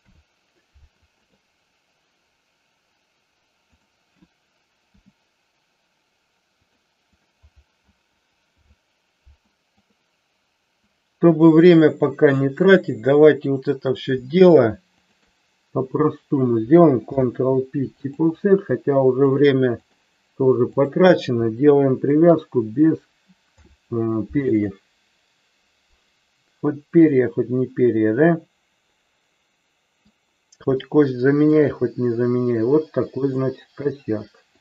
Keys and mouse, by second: 4.8 e, 7.1 click, 8.5 alt+p, 10.9-12.5 drag, 15.0 shift+click, 17.1 ctrl+p, 19.2 click, 20.6 click, 23.3 ctrl+p, 27.2-30.1 middle drag, 30.8-31.6 shift+middle drag, 33.2 click.